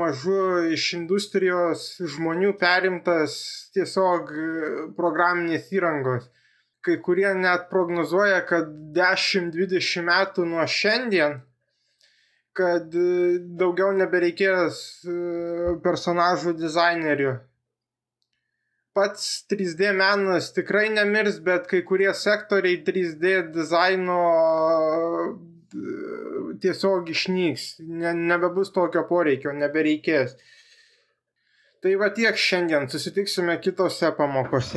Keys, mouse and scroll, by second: 20.7 g, 21.6 z, 26.7 click, 27.9 Tab, 32.0 s.